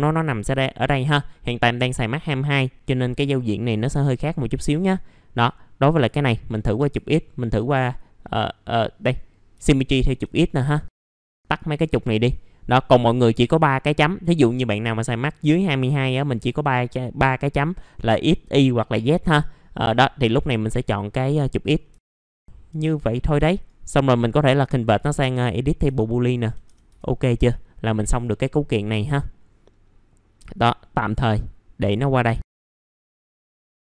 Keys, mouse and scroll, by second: 5.9 click, 9.7 alt+middle click, 10.7 alt+middle click, 11.3 click, 21.9 alt+middle click, 22.2 scroll up 1, 22.3 F4, 23.0 middle click, 23.1-23.5 scroll down 1, 23.5 right click, 24.9 click, 25.9 alt+middle click, 27.1 scroll down 1, 28.0 middle click, 28.2 scroll down 1, 28.9 middle click, 30.4-32.2 drag, 32.3-33.0 scroll up 1, 33.0 click, 33.4 scroll down 1, 33.5 middle click.